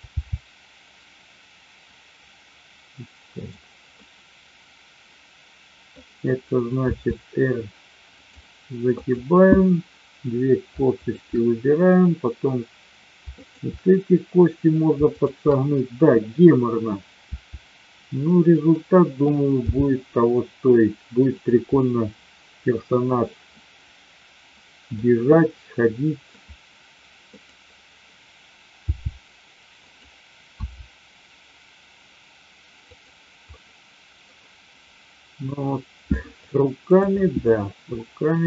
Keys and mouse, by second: 0.2 g, 3.9-5.8 middle drag, 6.8 r, 8.9-10.3 drag, 15.1-16.2 shift+drag, 17.3 r, 19.7 g, 21.7-22.8 middle drag, 23.6-24.9 middle drag, 25.3-26.3 middle drag, 27.3 click, 28.7 g, 29.8 click, 30.7 r, 33.5-34.2 middle drag, 36.5-37.1 drag, 38.3 r.